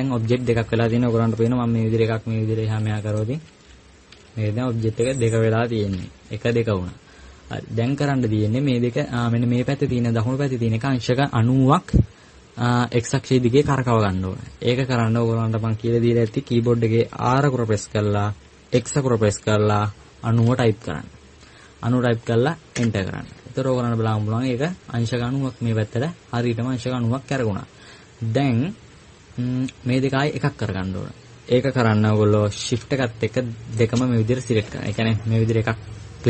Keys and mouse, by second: 2.2-2.9 right drag, 4.3 g, 6.0 g, 24.1-27.5 middle drag, 28.2-32.9 middle drag, 35.0-36.2 right drag.